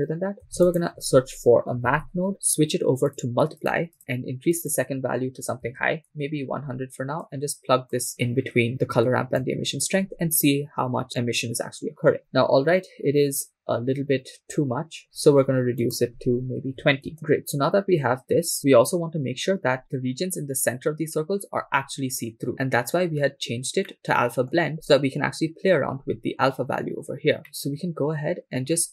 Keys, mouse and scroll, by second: 0.7 shift+a, 4.0 click, 4.6-6.2 drag, 5.8 0, 7.2 click, 12.2-13.0 shift+middle drag, 15.0 scroll up 3, 15.8-17.1 drag, 23.1-23.8 scroll down 3, 23.9 middle click, 27.4 scroll down 3, 27.5-28.8 middle drag.